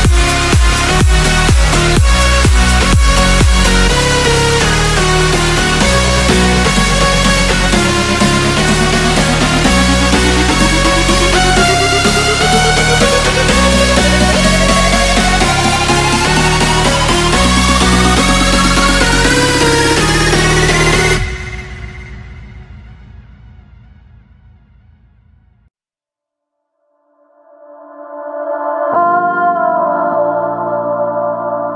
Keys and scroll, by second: 2.7 space, 5.1 space, 7.7 x, 7.9 ctrl+space, 8.3 z, 9.4 z, 11.8 space, 13.4 space, 13.8 z, 14.5 z, 18.4 space, 19.6 Escape, 19.8 space, 20.2 space, 20.9 ctrl+space, 22.6 space, 29.5 5.